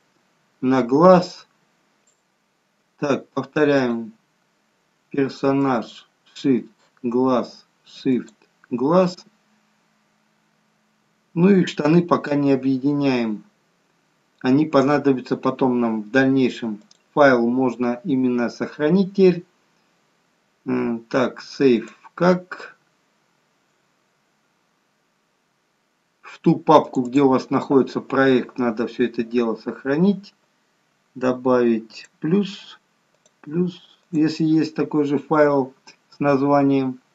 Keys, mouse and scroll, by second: 1.2 scroll up 2, 1.9 shift+click, 5.0 shift+click, 5.6 shift+click, 9.6-10.1 scroll down 2, 11.2-12.7 scroll down 3, 12.7-13.6 scroll up 2, 13.6-14.3 scroll down 1, 14.3-16.5 scroll down 1, 17.0 click, 35.7 scroll up 2, 36.6 scroll down 1, 36.8 scroll down 1.